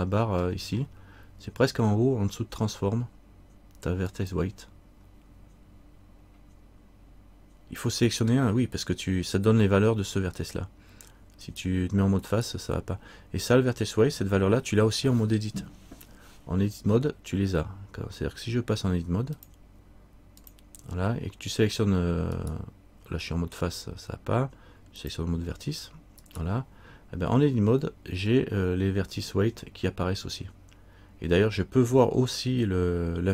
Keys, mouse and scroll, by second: 0.6-1.5 scroll up 4, 3.3-4.2 scroll up 4, 4.3 click, 10.6 right click, 19.5 click, 20.6 click, 22.5 right click, 25.2 click, 26.4 right click.